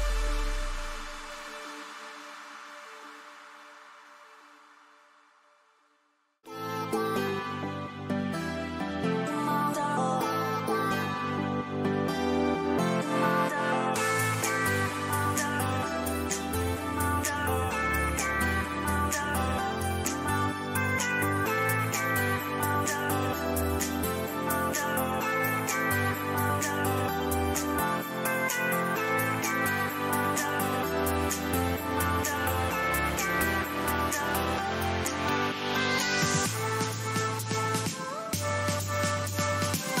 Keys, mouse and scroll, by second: 1.4-4.0 middle drag, 4.5 KP_3, 6.4 z, 14.6 middle click, 15.6 z, 16.4 a, 17.0-18.8 middle drag, 18.2 a, 18.5 a, 19.1 middle click, 24.4-27.3 middle drag, 27.3-28.4 right drag, 28.4 click, 28.6 right click, 30.5 Delete, 35.5-38.7 middle drag, 38.9-40.0 drag, 39.4 a.